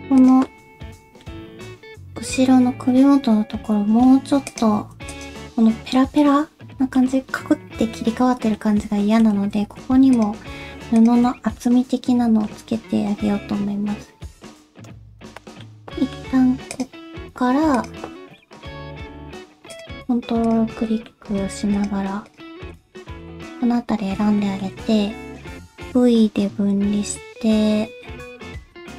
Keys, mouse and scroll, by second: 0.2 click, 0.5 middle click, 4.5 click, 5.1 shift+click, 6.2 middle click, 7.7 scroll down 2, 8.0 middle click, 9.0 shift+middle click, 9.5 scroll up 2, 10.1 shift+click, 11.0 shift+click, 11.3 scroll down 2, 11.6 middle click, 12.5-13.3 scroll up 3, 13.3-13.8 scroll down 2, 14.5 alt+z, 14.6 middle click, 15.2 /, 15.4 scroll up 1, 15.4 middle click, 15.8 alt+z, 16.0 middle click, 16.7 click, 17.7 click, 18.1 middle click, 19.7 ctrl+click, 20.4 ctrl+click, 20.8 middle click, 21.7 ctrl+click, 22.2 ctrl+click, 22.7 ctrl+click, 23.3 shift+middle click, 23.8-24.1 scroll up 2, 24.4 shift+middle click, 25.7 v.